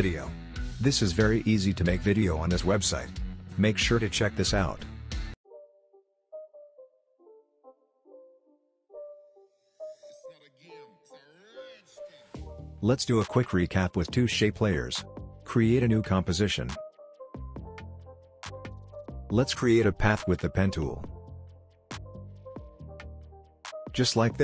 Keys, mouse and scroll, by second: 4.5 scroll down 1, 4.8-6.6 drag, 8.0 space, 12.4 space, 13.1-14.9 scroll up 1, 15.7-20.7 drag.